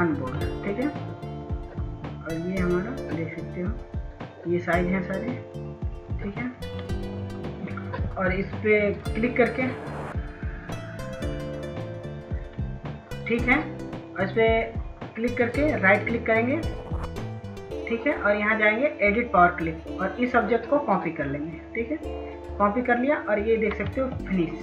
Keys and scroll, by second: 24.4 ctrl+s.